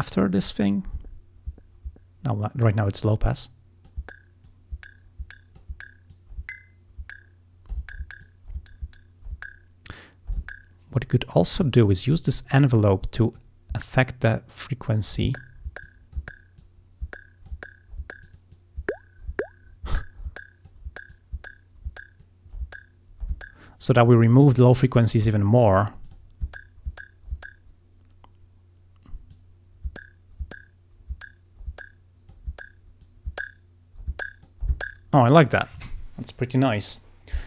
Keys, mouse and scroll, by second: 2.9-4.1 drag, 4.5 click, 8.2-10.6 drag, 12.3-13.6 drag, 14.3-15.4 drag, 15.9 click, 16.6-17.7 drag, 18.3-20.9 drag, 21.1-22.4 drag, 26.1 click, 29.3-32.5 drag, 33.0-34.7 drag.